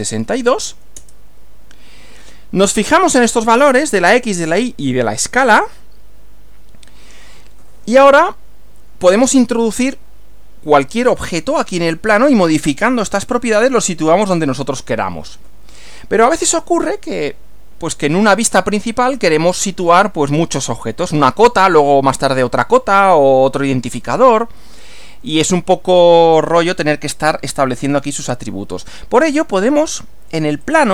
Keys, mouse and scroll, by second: 0.0-0.6 typing, 1.0 Return, 30.6 click.